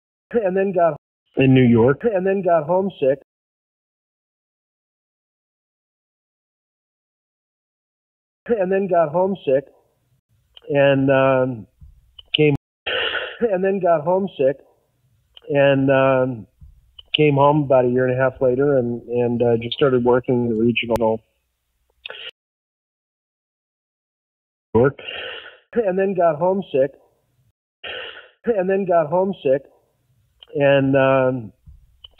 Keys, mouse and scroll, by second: 0.2 space, 0.9 space, 1.1 click, 1.1 space, 3.1 space, 3.8 ctrl+z, 5.9-7.3 drag, 8.0 ctrl+shift+Delete, 8.4 space, 9.3 click, 10.1 Delete, 10.7 click, 11.6 click, 12.4 space, 12.7 click, 12.7 space, 13.8 click, 14.6 click, 16.2-17.4 drag, 19.9 click, 21.0 s, 21.3 click, 22.2 space, 22.5 click, 22.9-24.1 drag, 24.5 click, 24.6 space, 26.4 click, 26.8 click, 27.4 space, 27.5 click, 27.7 space, 29.2 click.